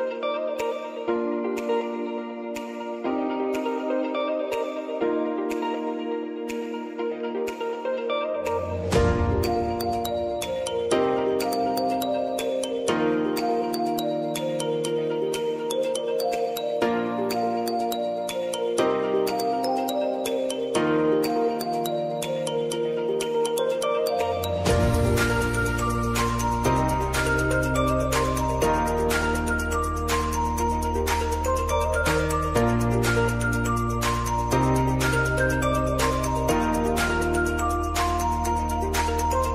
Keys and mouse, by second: 4.0 space, 6.4 space, 10.9 space, 13.0 click, 13.6-14.7 typing, 17.1 F4, 18.8 click, 20.5 click, 24.0 ctrl+a, 24.9 ctrl+shift+c, 25.7 typing, 27.4 typing, 27.7 Return, 29.3-31.9 drag, 31.9 s, 32.9 click, 34.5 space, 37.0 click, 38.1 Return, 38.8 click.